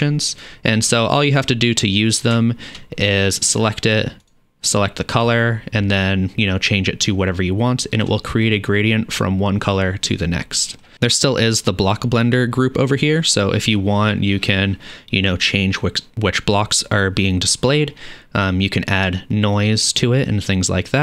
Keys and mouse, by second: 0.3 click, 0.4-4.2 middle drag, 4.2 click, 4.4-19.6 middle drag, 19.6-21.0 drag.